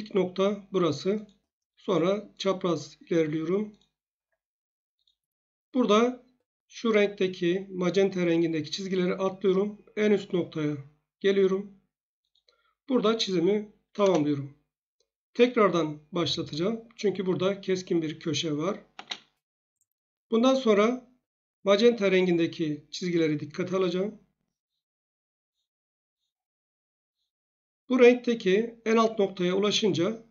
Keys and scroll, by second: 14.0 Return, 18.9 space.